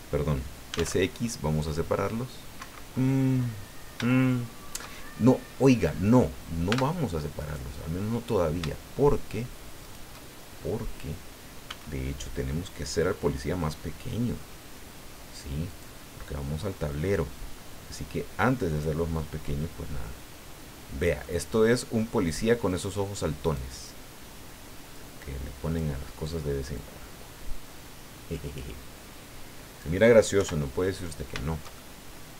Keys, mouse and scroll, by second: 0.4-1.3 typing, 2.5 Escape, 3.4-3.7 scroll up 2, 4.1 shift+click, 5.2 shift+scroll down 3, 6.7 Tab, 7.4 right click, 9.8 shift+right click, 10.4 shift+scroll down 3, 11.6 s, 15.7 click, 17.1-19.0 drag, 21.2-22.8 middle drag, 23.4 right click, 24.9-25.9 drag, 26.7-30.0 drag, 30.4 KP_1, 31.7-32.3 shift+drag.